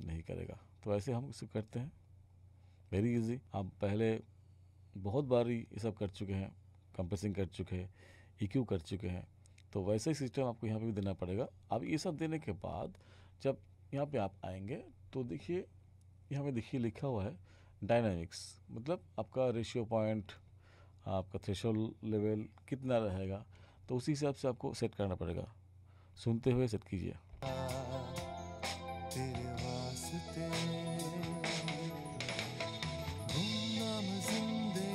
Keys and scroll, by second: 27.3 space.